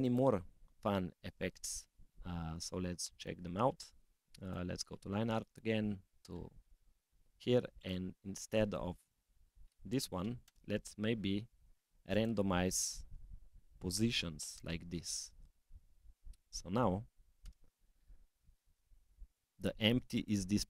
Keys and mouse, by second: 4.3 click, 6.0 click, 7.7 click, 9.4-10.5 drag, 12.1-13.5 drag, 14.5-15.6 drag, 16.3-17.5 drag, 19.3 click, 20.1 click.